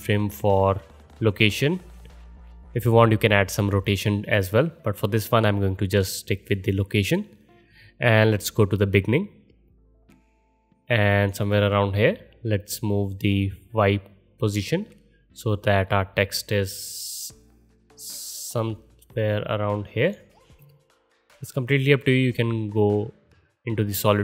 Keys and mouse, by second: 8.4-22.3 drag, 22.3-24.2 middle drag, 23.2 KP_0.